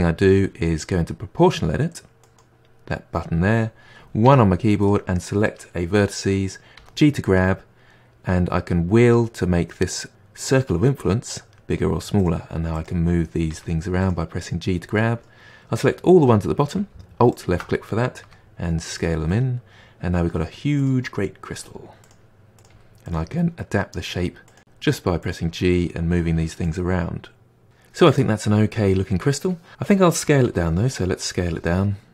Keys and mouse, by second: 2.2 click, 4.2 1, 4.8-6.2 drag, 6.7 g, 12.7 click, 13.4 g, 14.9-17.3 middle drag, 17.3 alt+click, 18.2 s, 19.2-20.7 middle drag, 20.7 click, 21.5 g, 22.5 click, 22.7 g, 23.3-24.4 middle drag, 24.4 click, 24.6 g, 25.4 click, 25.5 g, 25.8 middle click, 26.2 click, 26.4 g, 27.6-29.7 middle drag, 29.7 Tab, 30.4 s, 31.8 middle click.